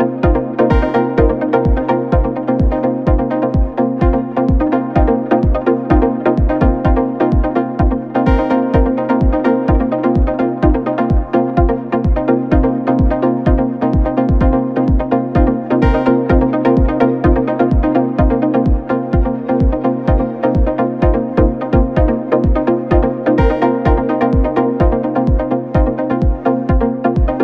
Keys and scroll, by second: 8.1 4, 12.8 3, 19.1 4, 20.6 ,, 24.0 ctrl+d, 24.2 Escape.